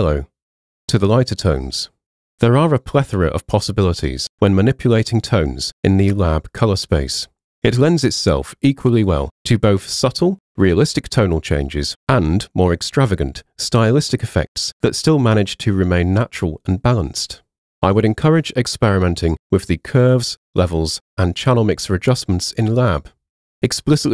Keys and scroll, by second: 18.5-20.0 typing, 23.0-24.1 typing.